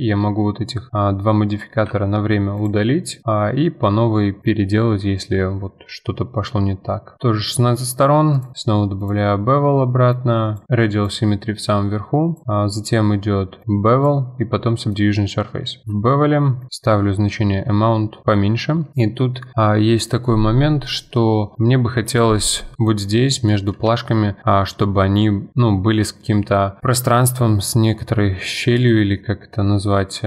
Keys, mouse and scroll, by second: 2.6 click, 4.4-7.2 drag, 8.3-10.6 drag, 10.6-11.0 drag, 12.3-14.1 drag, 14.7-15.1 middle drag, 15.1-16.6 scroll up 4, 16.6-18.7 shift+drag, 18.9-21.1 middle drag, 23.1-23.5 scroll down 2, 23.5-24.5 middle drag, 24.5-24.8 scroll down 3, 24.8-25.3 middle drag, 25.3-26.2 scroll up 2, 26.2-26.9 scroll up 1, 29.6-30.2 middle drag.